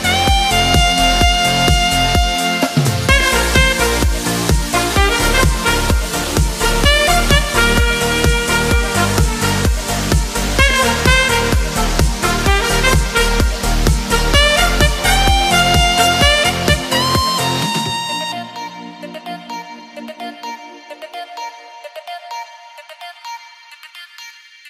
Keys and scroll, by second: 1.9 super+d, 22.2 super+=, 22.4 super+=, 23.1 super+-, 23.4 super+-, 24.1 super+-.